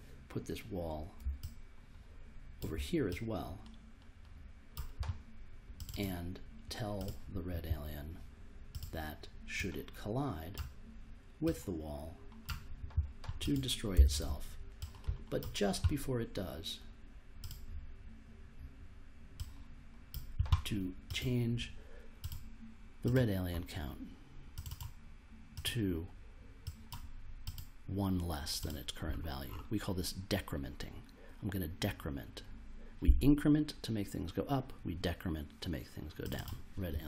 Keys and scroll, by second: 13.7-14.7 typing.